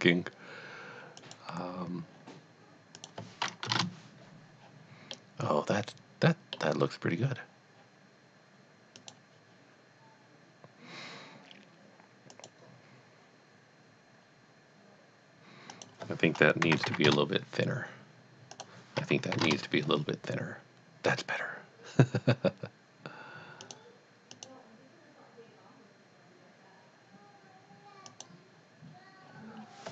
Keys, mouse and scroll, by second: 1.2 click, 3.0 click, 3.7 KP_0, 3.7 KP_Enter, 5.2 middle click, 9.0 click, 12.3 click, 15.7 click, 16.0 click, 16.6 KP_1, 16.7 KP_Decimal, 16.9 KP_5, 18.1 KP_Enter, 18.5 click, 19.3 KP_1, 19.4 KP_Enter, 23.6 click, 24.3 click, 28.1 click, 29.6-29.9 scroll down 1.